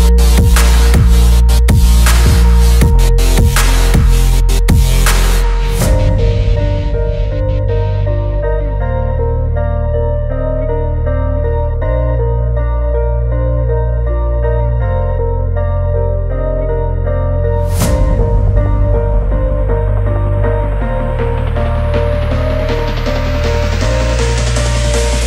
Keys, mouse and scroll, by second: 0.4 e, 4.2 click, 5.2 middle click, 7.7 shift+d, 8.8 right click, 10.1 p, 11.3 Tab, 12.9 click, 14.1 Tab, 23.1 click, 23.5 Tab.